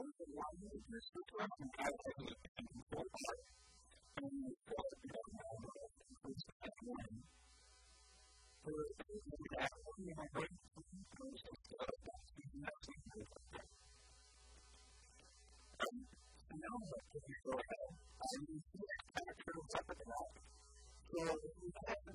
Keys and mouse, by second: 0.8 ctrl+r, 9.0-10.7 drag, 9.9 ctrl+r, 10.7 right click, 11.1 s, 11.3 right click, 12.3 Tab, 12.3 q, 12.5 Tab, 12.9 Tab, 13.2 middle click, 14.1 KP_3, 16.0 Tab, 17.7 Tab, 20.7 a, 20.9 a, 21.5 Tab.